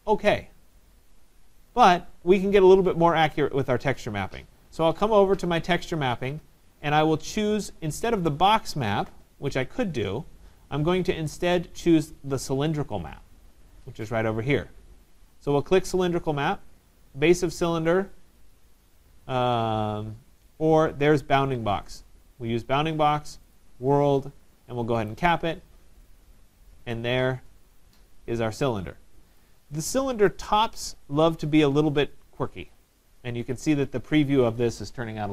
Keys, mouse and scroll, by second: 1.6 right click, 3.8 middle click, 4.3 middle click, 5.5 scroll, 6.4 scroll, 15.5-16.9 drag, 22.0 click, 23.6 click, 25.1 click, 29.4 right click, 30.3 right click, 30.8 middle click, 30.9 middle click, 31.1 middle click, 31.6 middle click, 31.8 middle click.